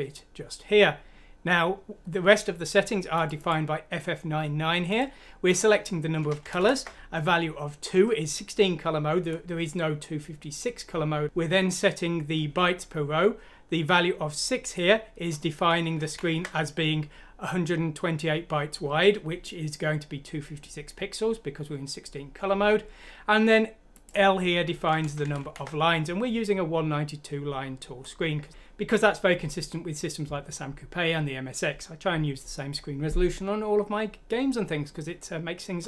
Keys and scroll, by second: 6.4 Left, 6.5 Left, 16.0 Right, 24.8 Left, 25.2 Left, 25.4 Left.